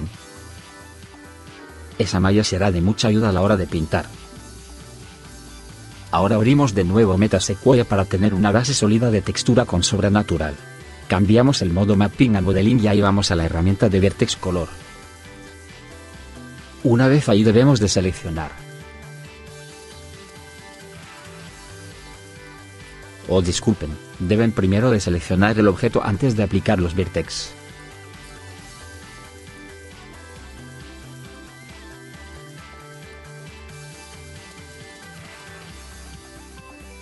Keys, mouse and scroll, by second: 5.2 click, 8.1 right click, 9.1 middle click, 9.7 right click, 18.1 middle click.